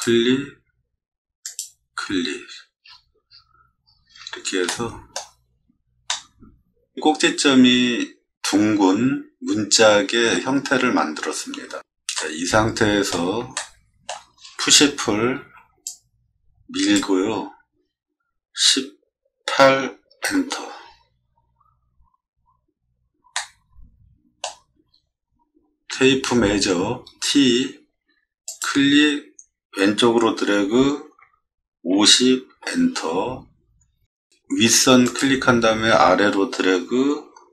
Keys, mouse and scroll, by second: 2.8 middle click, 3.3 middle click, 3.8 middle click, 4.7 shift+middle click, 5.6 middle click, 6.1 middle click, 12.1 middle click, 13.5 shift+middle click, 15.3 p, 15.8-16.9 drag, 18.5 1, 19.5 8, 20.2 Return, 23.3-24.4 middle drag, 28.4 click, 31.2 5, 31.9 0, 32.5 Return, 35.0 click.